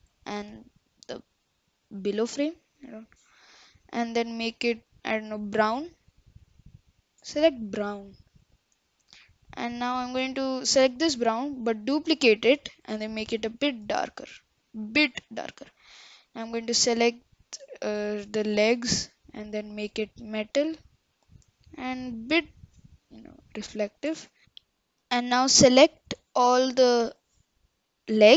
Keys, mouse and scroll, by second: 0.7-5.4 drag, 8.1 click, 9.8 click, 16.6 click, 18.9-24.4 drag, 25.8 click, 27.2 shift+click, 28.2 shift+click.